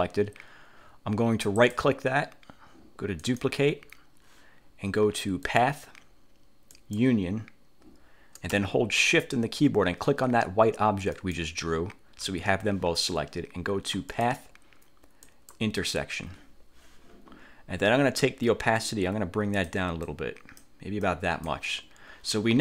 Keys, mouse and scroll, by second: 1.7 click, 3.3 click, 5.6 click, 6.8 click, 11.2 shift+click, 14.2 click, 15.4 click, 18.9-20.0 drag, 20.2 click, 21.2 click.